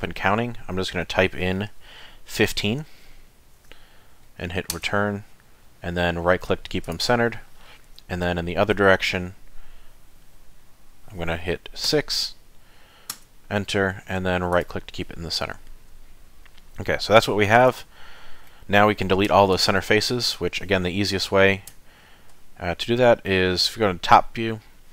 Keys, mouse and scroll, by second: 8.6 ctrl+r, 15.5 middle click, 17.3 shift+middle click, 17.8 middle click, 19.3 3, 19.5 click, 21.7 KP_7.